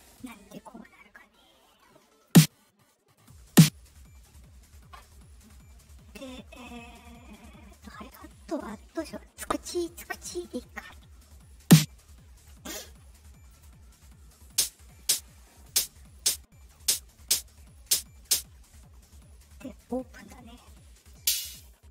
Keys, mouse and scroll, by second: 2.2 click, 3.1 right click, 3.4 click, 7.6 click, 11.5 click, 12.6 right click, 13.4 click, 14.4 click, 15.0 click, 15.6 click, 16.1 click, 16.7 click, 17.1 click, 17.7 click, 18.1 click, 21.0-21.9 drag.